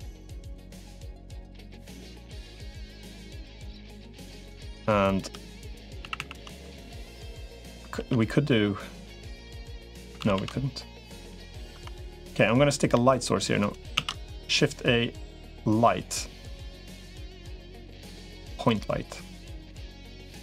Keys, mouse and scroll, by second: 0.9 middle click, 2.4 middle click, 3.6 click, 4.0 click, 4.4 shift+click, 5.8 a, 6.0 a, 7.8 ctrl+r, 10.0 ctrl+z, 10.2 ctrl+z, 10.9 middle click, 11.6 Tab, 11.8 middle click, 13.8 shift+a, 19.5 middle click.